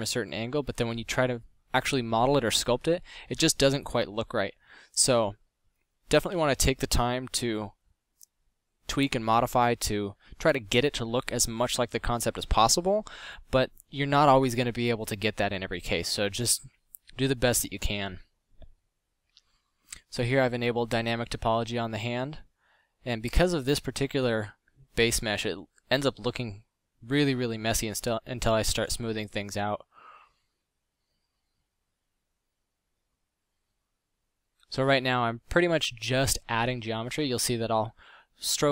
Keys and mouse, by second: 1.2 f, 3.9 middle click, 5.2 middle drag, 6.7-7.1 middle drag, 7.1 KP_5, 16.2 click, 17.0 f, 21.8 f, 30.2 f, 30.5 middle click.